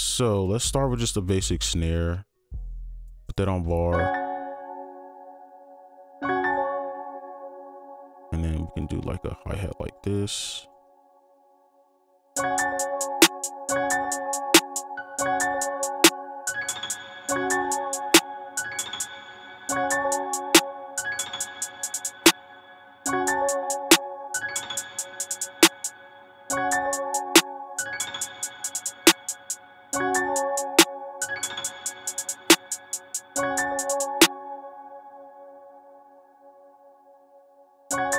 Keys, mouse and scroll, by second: 3.0-3.9 scroll down 1, 4.1 space, 4.6-5.6 scroll down 1, 6.7 space, 8.7 double click, 13.2 double click, 13.7 space, 15.0 right click, 15.1 space, 19.4 space, 21.2 double click, 23.0 space, 23.9 double click, 25.9 space, 26.5 space, 27.1 double click, 29.6 space, 29.9 space, 30.9 double click, 34.6 space, 36.8 right click.